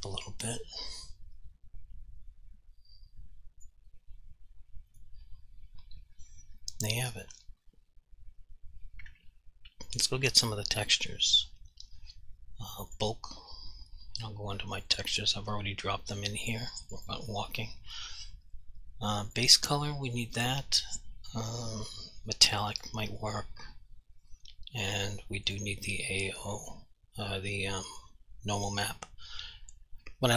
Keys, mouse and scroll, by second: 0.7 click, 5.0 click, 6.9 alt+click, 10.0 click, 12.9 click, 13.0 click, 15.0 double click, 17.0 click, 17.1 double click, 19.4 click, 22.8 shift+click, 25.6 shift+click.